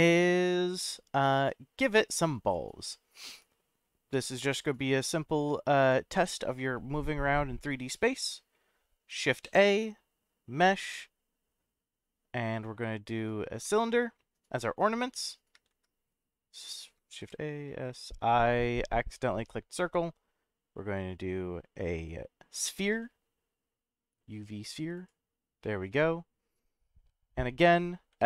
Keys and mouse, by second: 0.1-0.8 middle drag, 1.2 click, 3.1 middle click, 6.5-8.5 middle drag, 9.4 shift+a, 14.6-15.3 middle drag, 15.7 ctrl+z, 17.2 shift+a, 25.6-26.9 middle drag, 28.1 s.